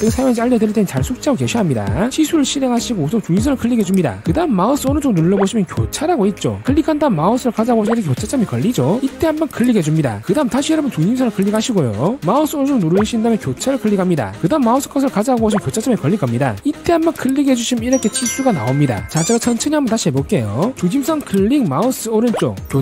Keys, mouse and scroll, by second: 4.3 click, 5.4 right click, 10.0 click, 12.1 click, 13.0 right click, 14.4 click, 18.0 click, 21.6 click, 22.4 right click.